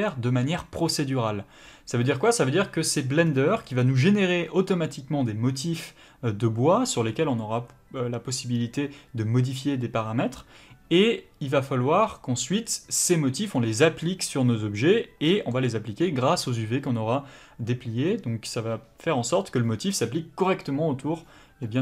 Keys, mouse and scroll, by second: 3.2 scroll down 1, 3.8 middle click.